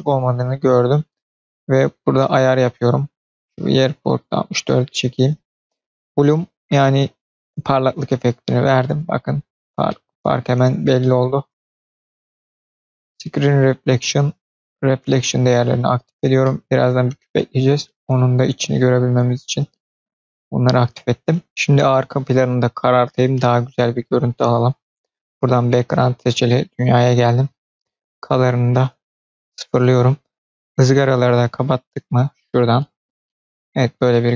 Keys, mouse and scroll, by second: 0.1-1.5 scroll up 1, 3.0-4.6 drag, 7.7 click, 8.7 middle click, 9.2-9.6 scroll down 4, 9.8 middle click, 10.5 scroll up 2, 10.9-11.3 middle drag, 12.7 click, 13.5 click, 14.5 click, 15.0 click, 15.7 click, 16.0 scroll down 2, 16.3-17.3 middle drag, 17.5-17.8 scroll up 2, 17.8-18.2 middle drag, 18.2 drag, 18.4-19.7 middle drag, 20.4 scroll down 1, 22.7 click, 27.5 click, 32.5 click, 33.2 middle click, 34.2-34.3 scroll down 2.